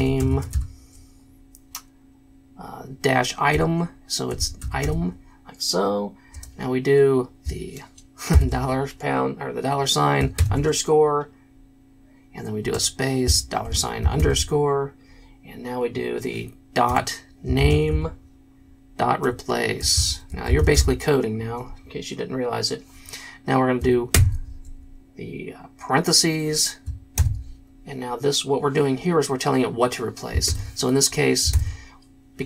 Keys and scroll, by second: 0.0-0.9 typing, 4.1-6.3 typing, 8.3 shift+4, 10.3 shift+-, 12.7-14.2 typing, 17.2-21.2 typing, 24.1 shift+9, 27.1 shift+', 30.5 shift+9, 31.5 shift+'.